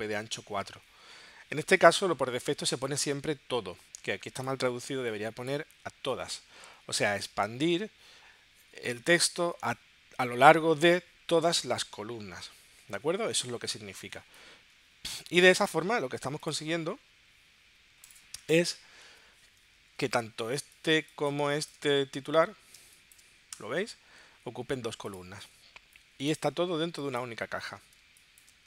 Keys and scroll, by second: 20.6 space, 22.8 space, 23.6 w.